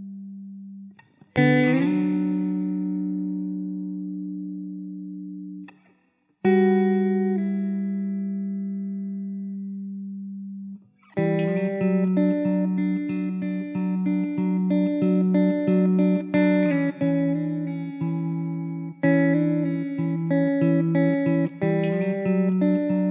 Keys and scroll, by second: 5.9 KP_0, 6.7 KP_0, 10.3 s, 13.3 s, 14.8 s, 16.6 s, 17.7 s, 20.0 ctrl+s.